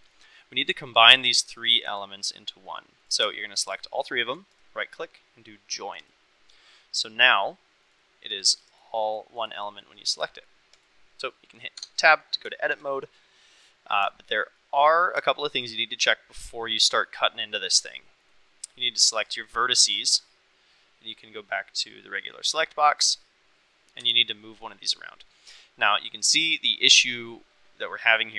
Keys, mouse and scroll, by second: 0.6 click, 1.0 click, 1.5 click, 1.8 click, 4.6-6.0 right drag, 7.8 click, 9.0 click, 9.3 click, 9.6 click, 10.0 click, 10.7 click, 11.7 Tab, 12.5 shift+middle click, 14.1 shift+middle click, 14.5 middle click, 15.2 shift+middle click, 18.2 click, 19.8 click, 21.1-22.1 drag, 23.0 click, 23.9 g, 25.9-27.0 drag.